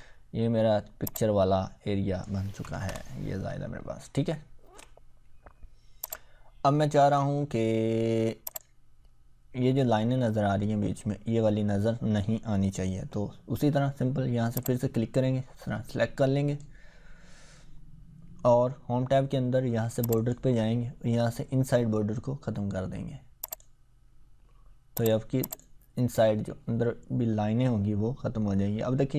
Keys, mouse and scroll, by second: 0.0-0.8 scroll up 1, 1.1-2.4 drag, 2.6 BackSpace, 2.9 Return, 3.4 scroll up 1, 4.2 scroll down 2, 6.0-7.3 drag, 7.9-8.3 scroll down 1, 8.5 click, 14.6-16.8 drag, 20.1 click, 23.4 click.